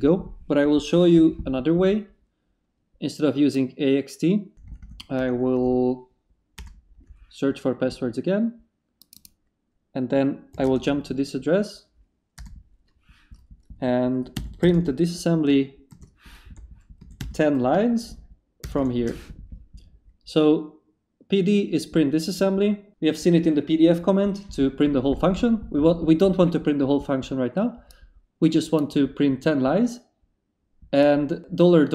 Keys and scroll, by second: 4.7 Up, 6.6 Return, 10.5 s, 10.6 space, 12.4 Return, 14.3-18.6 typing.